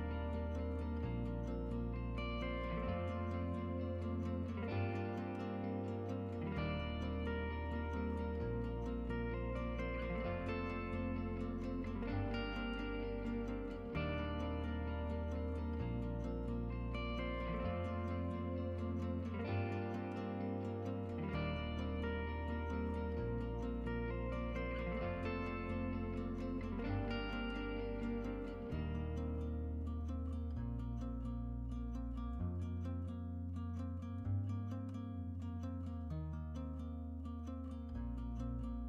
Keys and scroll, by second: 23.8 8.